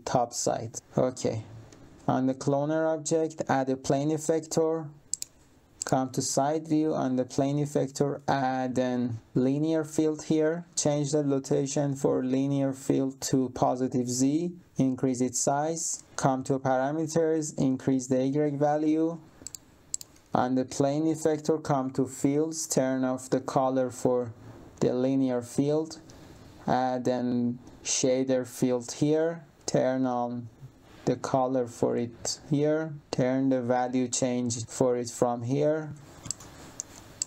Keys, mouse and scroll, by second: 1.6 click, 3.4 click, 5.0 middle click, 5.7 middle click, 8.1 click, 10.2 click, 10.7 click, 12.5 click, 14.5 click, 16.0 click, 17.6 click, 19.4 middle click, 20.2 click, 21.1 click, 25.0 click, 25.6 click, 28.7 click, 31.9 click, 33.0 click, 33.3 click, 36.2 middle click, 37.1 middle click.